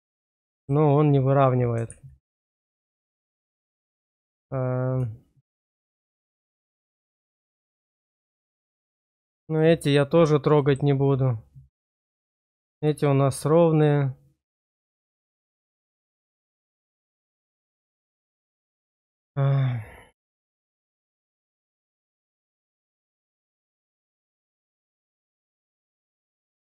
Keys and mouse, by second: 0.4 shift+click, 2.9 shift+click, 3.8 shift+click, 5.9 shift+middle click, 6.3 click, 7.3 shift+middle click, 8.4 shift+middle click, 9.5 shift+middle click, 10.5 shift+middle click, 12.1 shift+middle click, 13.0 shift+middle click, 14.6 shift+middle click, 15.3 shift+middle click, 16.1 click, 17.9 click, 20.9 click, 21.7 click, 23.0-26.0 drag.